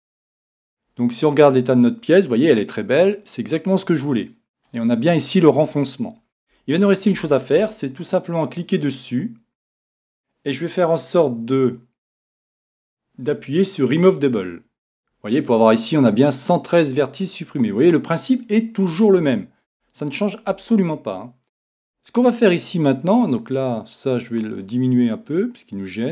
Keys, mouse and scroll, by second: 1.4-3.3 middle drag, 5.0-5.8 scroll up 1, 5.8-7.0 scroll down 1, 7.0-7.7 scroll down 1, 7.2 a, 7.6 a, 14.1-15.8 drag, 17.5-19.5 middle drag, 19.2 Tab, 19.7 Tab, 20.5 Tab, 24.6-26.1 drag.